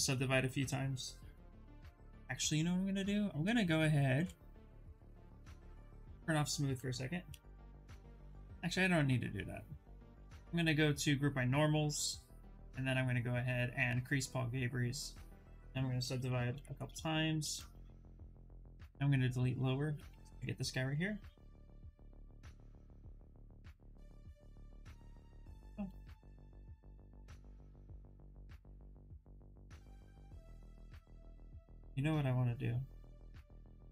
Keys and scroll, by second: 6.9 2, 15.9 ctrl+d, 16.1 ctrl+d, 16.5 shift+f, 17.0 shift+f, 19.1 s.